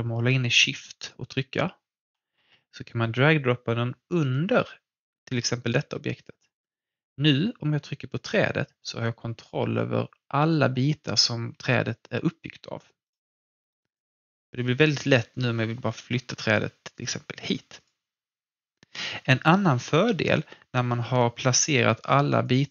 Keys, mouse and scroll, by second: 13.0 click, 13.5 alt+middle click, 13.9-17.8 alt+drag, 21.5 click.